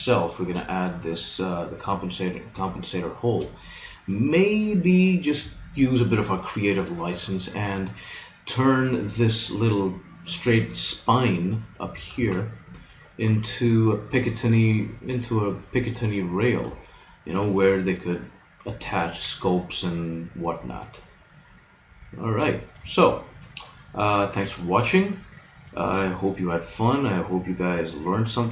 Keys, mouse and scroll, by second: 2.8-6.6 middle drag, 11.4 middle click, 12.2 z, 18.8-20.8 middle drag, 20.9 middle click, 24.2-28.0 middle drag.